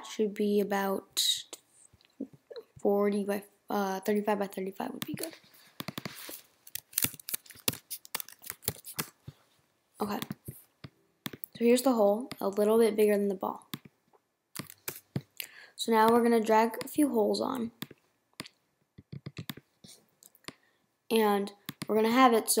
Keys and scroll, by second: 6.5-7.5 typing, 8.9 Return, 14.9 BackSpace.